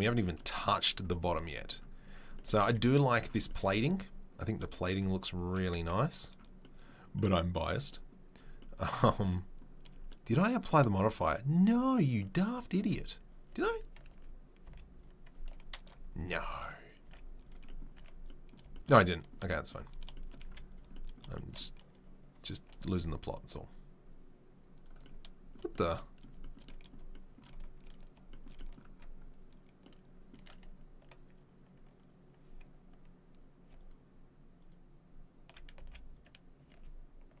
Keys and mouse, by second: 2.6 Tab, 5.8 2, 11.0 Tab, 11.5 Tab, 13.5 Tab, 13.9 a, 14.1 a, 14.6 z, 16.2 ctrl+r, 17.0 z, 17.9 a, 18.6-22.6 shift+middle drag, 20.4 z, 22.6 ctrl+click, 22.9 ctrl+r, 23.0-33.8 middle drag, 33.8 alt+click, 33.9 alt+middle click, 34.6 alt+click, 35.5-37.4 middle drag, 35.8 z, 36.7 a.